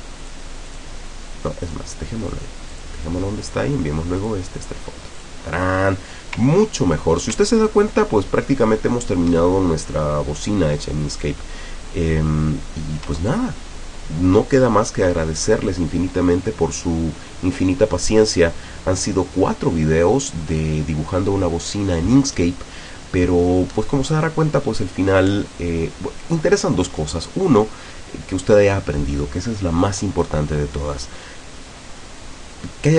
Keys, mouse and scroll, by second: 0.3 click, 0.8 click, 1.7 click, 2.8 click, 4.2 click, 5.2 click, 6.6 ctrl+scroll down 2, 7.6 ctrl+scroll up 2, 8.1 ctrl+scroll up 2, 10.2 ctrl+scroll down 2, 13.5 ctrl+scroll down 2, 14.5 ctrl+scroll up 2.